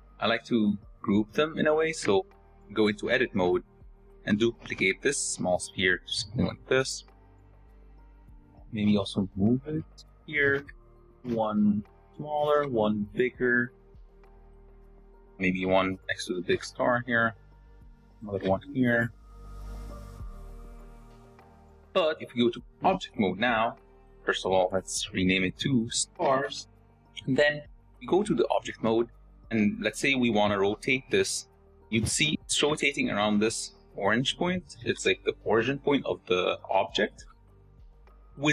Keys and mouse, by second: 2.3 Tab, 3.7 shift+click, 4.6 shift+d, 5.3 s, 6.6 shift+d, 7.6 s, 8.1 g, 8.9 s, 10.7 g, 11.2 shift+d, 12.6-15.9 typing, 15.4 shift+click, 17.5 shift+d, 18.6 shift+d, 19.2 s, 22.8 Tab, 24.3 click, 24.6-26.8 drag, 29.5 shift+drag, 30.7 r, 34.8 r.